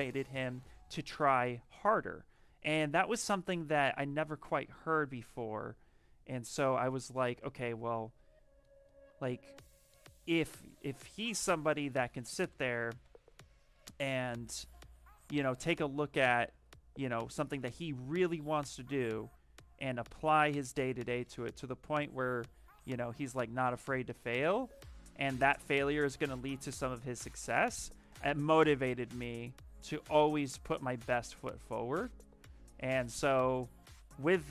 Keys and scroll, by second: 11.7 ctrl+z, 12.1-13.1 typing, 14.5 ctrl+z, 15.1 space, 32.3 ctrl+z, 32.7 space.